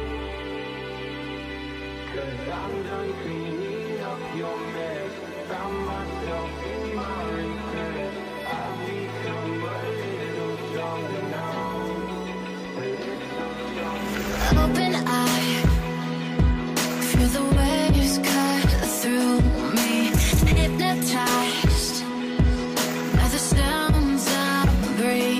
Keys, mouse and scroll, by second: 0.4-1.1 scroll down 1, 5.8 scroll, 5.8-6.7 scroll up 2, 6.7 Right, 6.9 Right, 7.0 Right, 7.1 Right, 7.3 Right, 7.7 Right, 7.9 Right, 8.5 Right, 8.7 Right, 10.1 alt+scroll down 1, 13.0-15.6 scroll up 1, 16.4 double click, 17.2 Return, 19.9-20.7 typing, 21.2 double click.